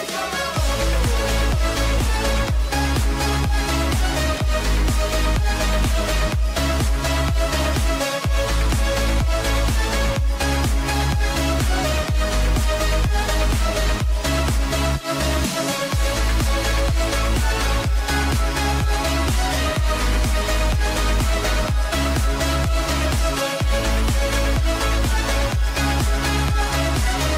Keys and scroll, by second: 0.7 w, 1.5 ], 15.6 h, 17.8 ctrl+j, 18.9 ctrl+shift+a, 22.0 h.